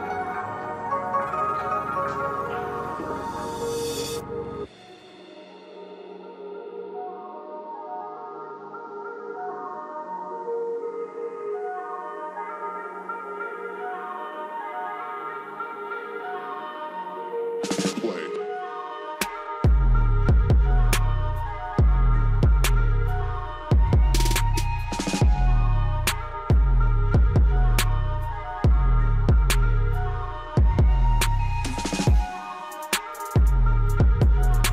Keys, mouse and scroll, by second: 0.6 right click, 1.3 click, 1.7-2.0 scroll down 1, 3.3-5.2 drag, 5.2-5.6 scroll down 1, 6.7 scroll up 1, 7.3-9.4 drag, 9.4 scroll up 1, 11.1-13.8 drag, 13.7 ctrl+z, 15.1-17.0 drag, 17.0-18.7 drag, 18.7 ctrl+right click, 19.5-20.2 scroll down 1, 21.2 click, 22.5 ctrl+right click, 23.0-23.3 scroll down 1, 24.9 click, 26.1 ctrl+right click, 26.8 scroll down 1, 27.4 click, 28.0 scroll up 1, 28.8 click, 30.5 right click, 31.1-31.4 scroll up 1, 32.3-34.4 drag, 34.4 scroll down 1.